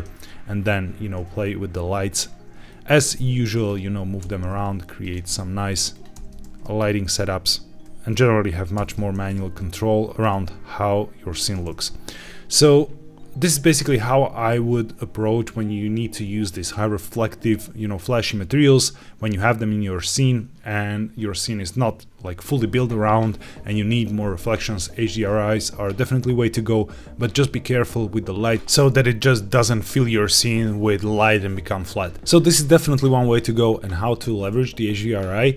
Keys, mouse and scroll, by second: 0.1-0.8 scroll down 1, 1.3-1.7 shift+middle drag, 2.2-2.5 scroll up 1, 2.6 shift+middle click, 3.6 click, 4.1-6.3 typing, 4.9 click, 5.8 click, 7.8 click, 8.7 Escape, 8.7 g, 9.0 shift+z, 10.2 shift+z, 11.3 click, 11.7-12.5 scroll down 1, 32.1-32.9 scroll up 1.